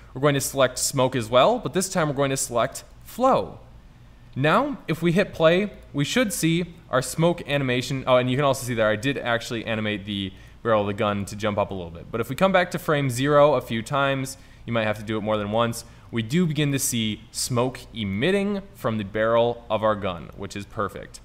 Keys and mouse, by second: 7.4-7.9 middle drag, 9.6 middle click, 9.7-14.6 drag, 14.6-15.1 middle drag, 15.8 middle click, 17.0-18.7 middle drag, 20.0-20.5 middle drag, 20.6 middle click.